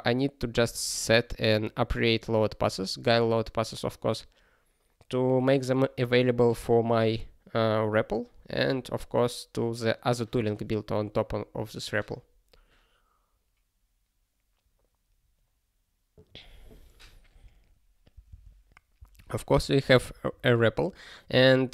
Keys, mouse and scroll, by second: 18.1 ctrl+n, 18.3 ctrl+space, 19.0 ctrl+n, 19.4 ctrl+g, 19.8 ctrl+p.